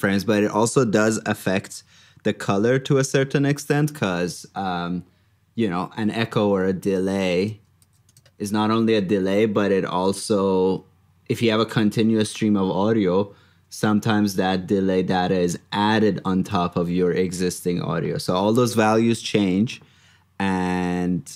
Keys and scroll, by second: 3.9 super+Tab, 7.7 super+c, 9.0 super+v, 12.0 super+Tab, 14.2 super+Tab, 16.9 super+Tab.